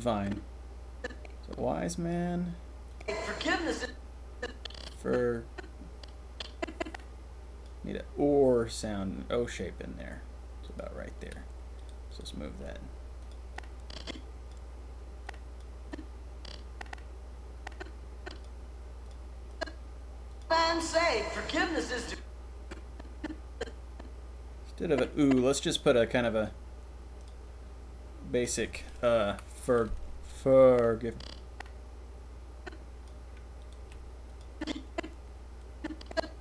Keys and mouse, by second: 0.2-1.2 drag, 1.3-2.1 drag, 2.9 click, 3.7 click, 4.4-7.6 drag, 11.7 click, 12.5 g, 13.5-14.5 drag, 15.2 click, 15.9 drag, 16.2-18.4 drag, 19.0 click, 19.2 click, 20.3 click, 21.9 click, 22.6-25.6 drag, 25.6-28.4 middle drag, 28.4 click, 28.5-30.7 middle drag, 29.2 Delete, 30.7 click, 33.8 g, 34.6-36.2 drag.